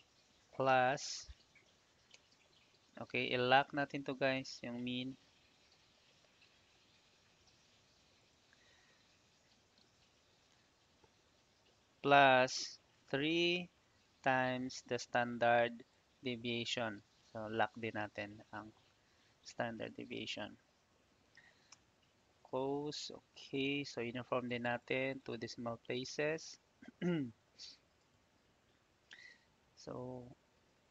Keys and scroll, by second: 0.6 shift+=, 2.0 shift+9, 7.4 F4, 13.2 3, 14.0 shift+8, 18.9 F4, 21.3 shift+0, 21.7 Return.